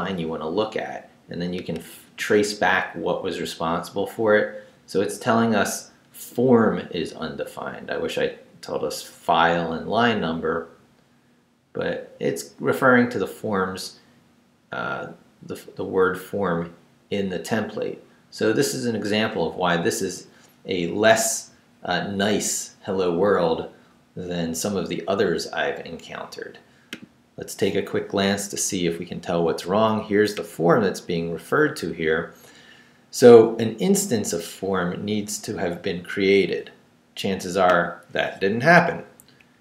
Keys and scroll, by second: 39.4 Up.